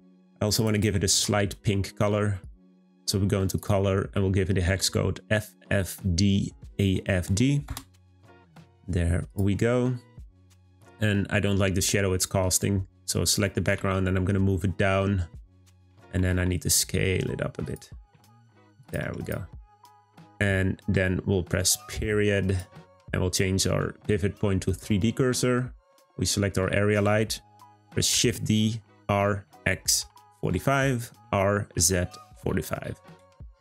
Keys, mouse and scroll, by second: 2.8 click, 9.2 click, 10.6 click, 13.8 g, 16.1 a, 19.2 click, 22.4 click, 22.8 ., 25.8 click, 26.2 scroll down 1, 28.1 shift+d.